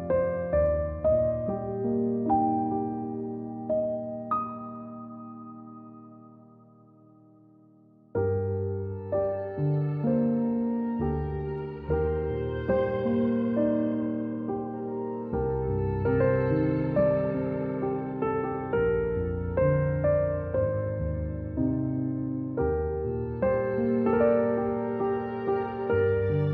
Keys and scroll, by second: 0.2 v, 1.8 z, 3.0-7.5 typing, 13.3 c, 15.9 a, 18.6 =, 20.6 a.